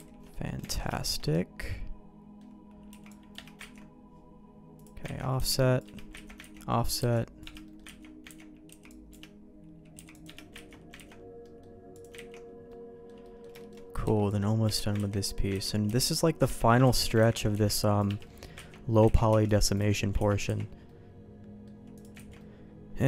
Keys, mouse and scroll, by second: 0.0 ctrl+z, 0.3 middle click, 0.6 alt+a, 0.9 shift+middle click, 1.2-2.4 middle drag, 2.9 c, 3.6 ctrl+q, 5.2 ctrl+x, 5.3 c, 6.2 ctrl+q, 6.4 ctrl+x, 7.0 c, 7.6 middle click, 8.0 ctrl+q, 8.3 ctrl+x, 8.7 c, 9.9 c, 10.7 ctrl+q, 10.9 ctrl+x, 11.4 middle click, 11.9 click, 12.3 ctrl+x, 12.7 middle click, 13.2 click, 13.6 click, 14.0 c, 15.0 ctrl+q, 15.6 ctrl+x, 15.8 c, 16.8 ctrl+q, 17.2 ctrl+x, 17.5 c, 18.2 middle click, 18.5 ctrl+q, 19.0 ctrl+x, 19.3 c, 20.2 ctrl+q, 20.5 ctrl+x, 20.8 middle click, 21.9 click, 22.2 ctrl+x, 22.4 middle click.